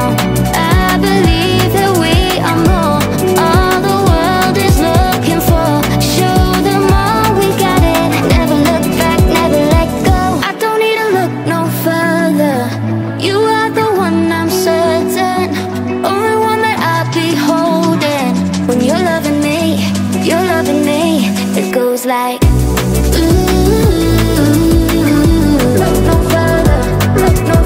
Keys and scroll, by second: 8.6 Return, 22.4 space, 25.4 ctrl+z.